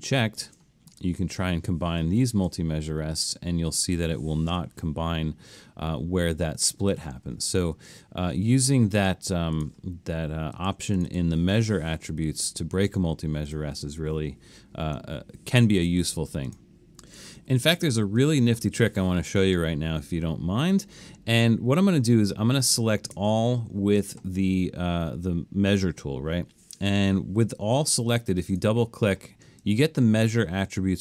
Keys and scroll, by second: 7.6 super+z, 17.4 super+-, 23.2 super+a.